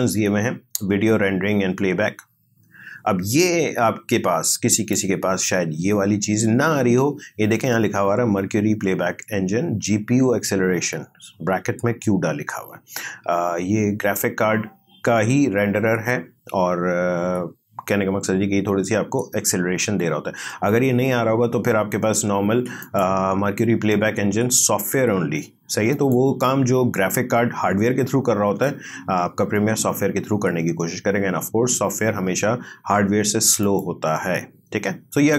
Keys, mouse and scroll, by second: 22.8 click, 25.9 click, 33.6 click.